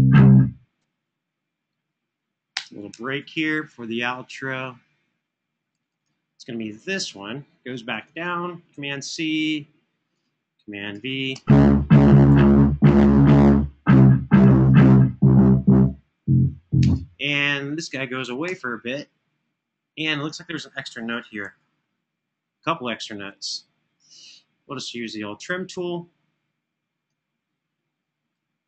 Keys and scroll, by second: 2.3 space, 2.8 super+[, 8.6 super+c, 10.7 super+v, 11.0 space, 12.1 super+], 16.6 space, 18.2 BackSpace, 21.1 alt+f, 25.0 Escape.